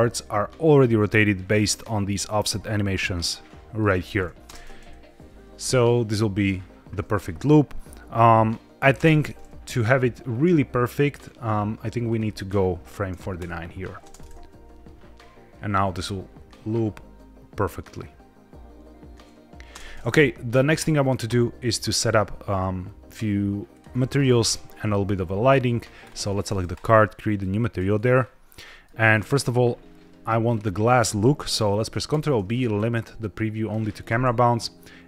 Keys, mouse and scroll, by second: 2.5-2.9 scroll down 2, 2.9 middle click, 4.1 scroll up 1, 4.3 space, 8.9 space, 13.3 click, 13.9 space, 19.6 space, 21.6-23.7 drag, 25.9 click, 26.6 click, 27.3 click, 28.0-28.5 scroll up 2, 28.5 middle click, 29.0-29.9 scroll up 2, 30.4-31.2 scroll down 2, 32.0 ctrl+b.